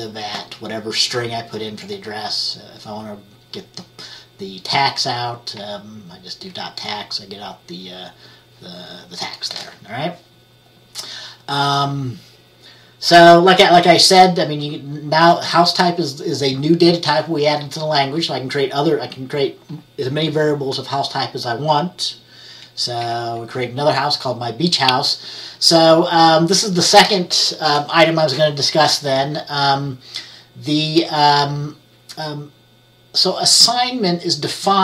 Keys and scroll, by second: 5.7 F10, 23.1 F10.